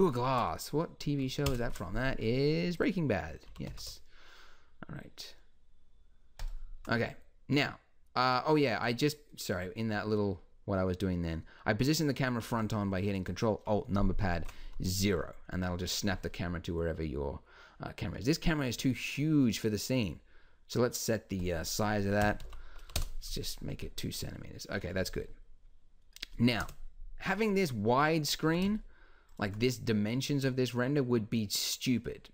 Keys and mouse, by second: 1.5 ctrl+alt+KP_0, 3.5 g, 7.0-13.5 drag, 15.6 click, 15.8-18.5 middle drag, 21.4-23.9 drag, 26.6 KP_0, 28.5 g.